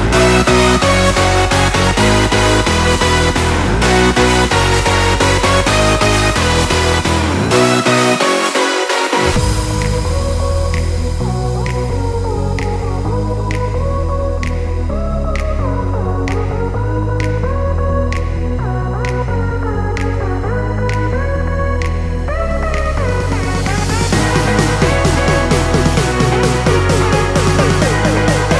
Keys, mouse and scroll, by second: 3.0 Return, 3.8 alt+scroll up 1, 5.1-11.4 drag, 11.9 click, 13.5 alt+scroll down 1, 14.7 alt+scroll up 1, 16.5 click, 16.6 click, 16.8 Down, 19.8 click, 21.2 ctrl+t, 21.6 right click, 22.9 click.